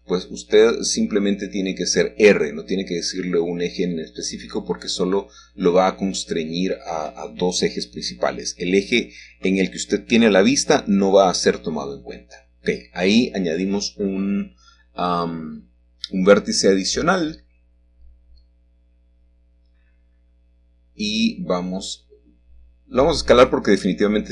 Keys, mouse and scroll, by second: 0.0 click, 1.4 click, 3.0 g, 4.4 z, 6.5 click, 8.9 shift+click, 10.6 right click, 11.3 click, 12.6 click, 18.4 click, 20.3 a, 21.3 z, 22.8 Escape, 23.7 s.